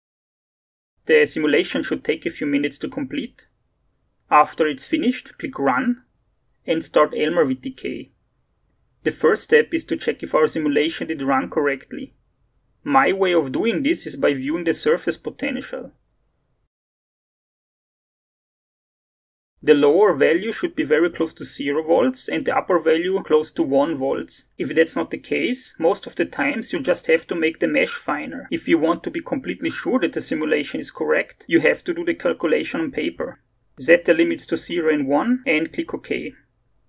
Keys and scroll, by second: 34.5 0.